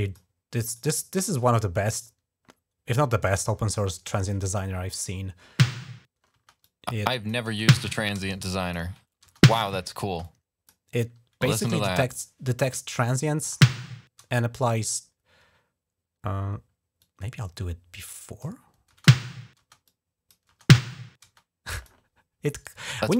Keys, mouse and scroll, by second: 0.5 click, 5.2 space, 6.1 space, 6.4 click, 7.3-9.6 typing, 8.1 click, 10.1 click, 11.9 click, 12.8 click, 13.2 click, 14.6 click, 16.8-18.2 drag, 18.7-21.1 typing, 19.7 click, 21.6 click, 22.3 right click, 22.9 click.